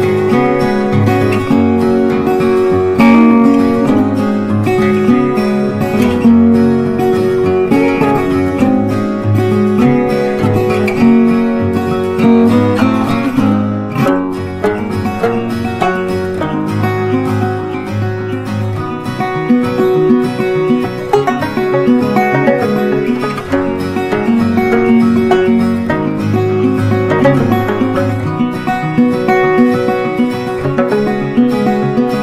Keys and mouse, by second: 0.3-5.3 drag, 7.5 c, 8.6-11.4 drag, 15.9 right click, 17.0 click, 19.6-28.4 drag.